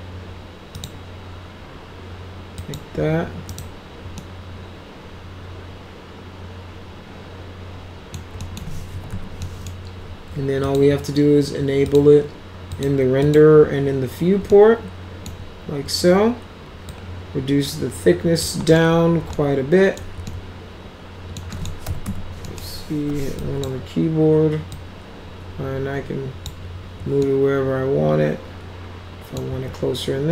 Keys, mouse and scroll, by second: 0.8 middle click, 2.6 middle click, 2.7 click, 3.5 right click, 4.2-8.1 alt+middle drag, 8.4 middle click, 8.7-9.6 typing, 9.5 middle click, 10.6 click, 11.6-11.9 scroll up 2, 11.9 click, 12.7 click, 13.2 click, 14.5 alt+middle click, 16.9-18.4 drag, 18.7 middle click, 19.3 alt+middle click, 20.3-21.4 alt+middle drag, 21.5 middle click, 21.6-22.9 typing, 22.4 middle click, 23.4 drag, 24.7-26.5 drag, 27.2-29.4 alt+middle drag.